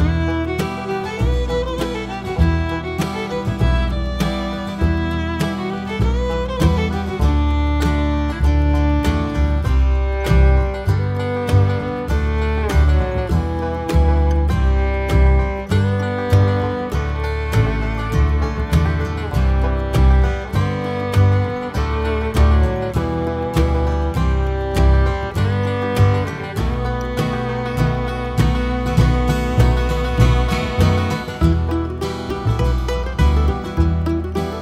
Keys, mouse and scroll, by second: 1.1 x, 1.1 click, 1.2 Tab, 2.0 click, 3.1 ctrl+j, 3.7 click, 3.9 Tab, 5.6 shift+d, 5.9 shift+click, 6.2 click, 6.5 Tab, 7.1 click, 9.1 Tab, 9.5 shift+click, 10.2 ctrl+j, 11.0 click, 11.1 Tab, 12.1 right click, 12.5 Tab, 13.1 shift+click, 13.3 click, 13.6 Tab, 14.1 click, 15.3 shift+click, 16.0 ctrl+j, 16.3 Tab, 18.3-18.7 scroll up 1, 18.7 click, 19.1 Tab, 19.4 click, 19.7 KP_Decimal, 20.0 scroll up 1, 20.3-20.7 scroll down 1, 20.8 scroll up 1, 21.5 alt+click, 21.9 ctrl+KP_Add, 22.7-23.9 scroll down 2, 23.9 click, 25.1-26.1 drag, 26.1 g, 27.5 right click, 28.2 g, 29.7 Tab, 30.2-30.6 scroll down 2, 30.6 z, 31.6 click, 31.9 scroll up 2, 32.0 Tab, 33.2 g, 34.1 click.